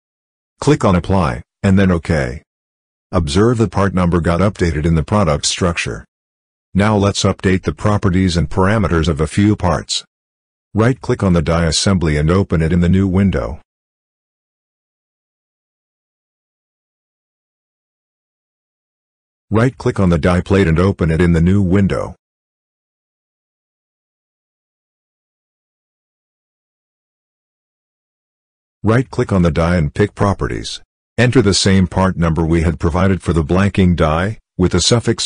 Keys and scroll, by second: 32.6 ctrl+v.